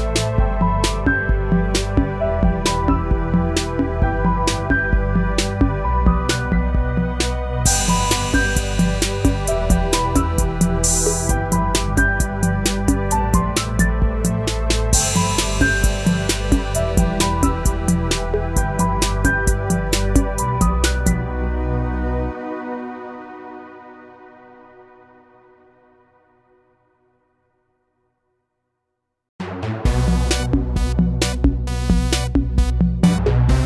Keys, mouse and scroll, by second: 12.9-19.5 drag, 20.2-22.7 drag, 25.3 click, 29.3 click.